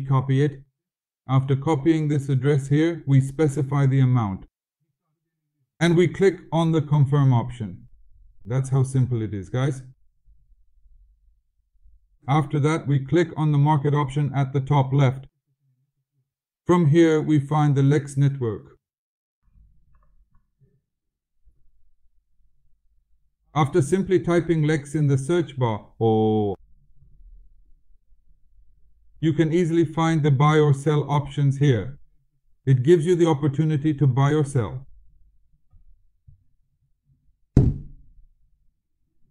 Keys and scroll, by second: 1.9 ctrl+v.